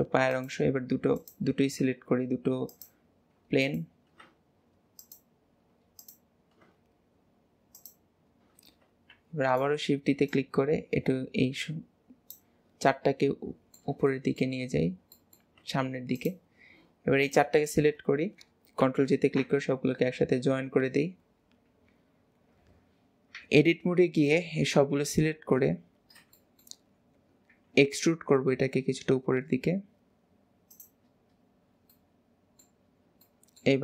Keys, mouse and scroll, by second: 0.4 shift+click, 1.2 click, 2.8 shift+click, 3.7 click, 5.1 shift+click, 6.1 click, 7.8 shift+click, 9.2 shift+d, 10.4 click, 13.0-14.8 middle drag, 14.8 scroll up 1, 15.2-16.3 middle drag, 16.3 shift+click, 17.3 shift+click, 19.2 ctrl+j, 24.9 KP_3, 26.2 scroll up 1, 26.4 shift+middle click, 31.3-32.0 scroll down 2, 32.0-33.0 middle drag, 33.0 scroll down 1, 33.3 middle click.